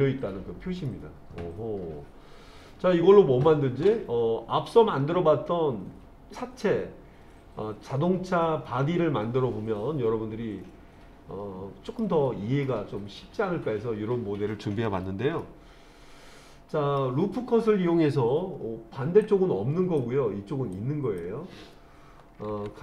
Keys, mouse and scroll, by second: 0.9-12.0 middle drag, 15.4-17.0 middle drag, 19.2 click, 20.8 click.